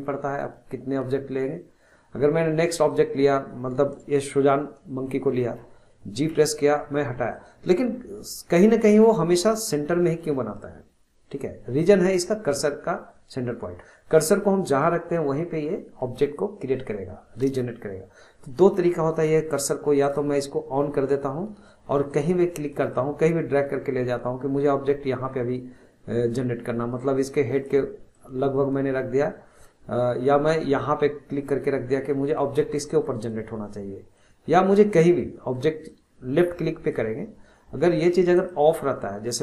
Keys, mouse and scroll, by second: 6.3 g, 8.7 click, 20.0-22.2 drag, 22.8-25.7 drag, 28.1-30.8 middle drag, 30.8-32.7 drag, 32.7-33.0 scroll down 2, 33.0-33.5 middle drag, 33.5 scroll up 1, 33.7-35.9 middle drag, 35.9-39.4 drag.